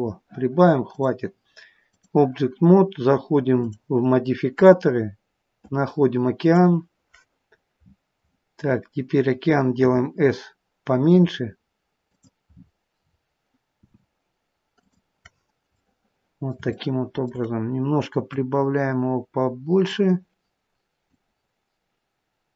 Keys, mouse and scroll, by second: 0.9 click, 3.6 click, 8.6-9.8 scroll down 10, 9.8 s, 12.4-13.7 scroll up 11, 13.7 s, 15.2-15.6 scroll up 2, 15.7 middle click, 16.6 shift+scroll up 1, 16.7 shift+middle click, 18.1 click, 21.0 click.